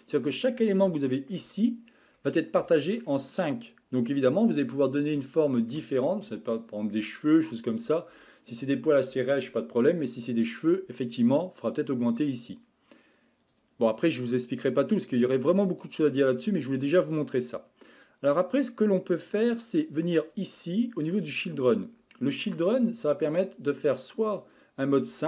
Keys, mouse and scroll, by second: 0.8-1.6 shift+middle drag, 1.6-2.4 scroll up 10, 2.7-4.2 shift+middle drag, 4.2-5.2 scroll down 12, 5.2-8.3 shift+middle drag, 13.5-14.1 drag, 14.1 scroll down 3, 14.6 scroll up 3, 15.6-16.1 drag, 16.1-16.5 scroll down 2, 18.7 scroll down 2, 20.2-20.7 drag, 20.7-21.0 scroll down 3, 24.4 click.